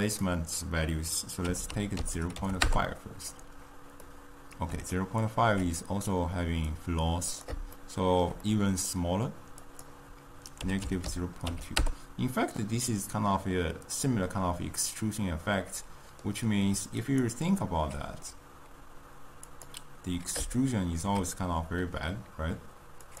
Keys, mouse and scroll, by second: 4.1-6.7 middle drag, 6.7-7.8 drag, 7.8-9.7 shift+middle drag, 9.7-12.7 drag, 12.8-16.0 middle drag, 17.1 click, 19.6 click, 20.6-23.2 shift+middle drag.